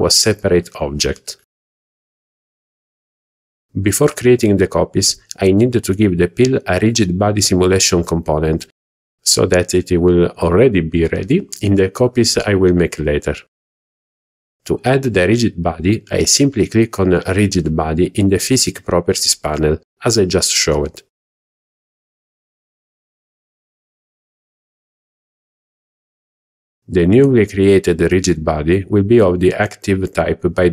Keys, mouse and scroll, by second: 1.0 click, 3.7 KP_1, 4.5 scroll down 2, 5.1-5.5 shift+middle drag, 5.7-6.4 scroll up 2, 13.9 click, 14.4 scroll down 1, 14.5 shift+middle click.